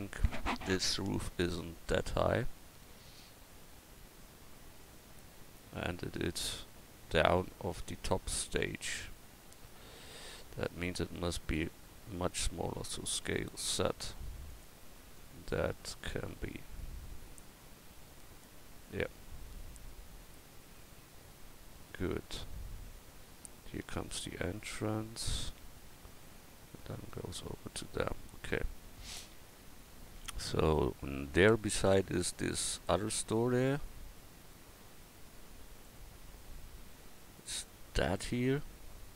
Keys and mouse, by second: 12.7 s, 29.6 KP_1.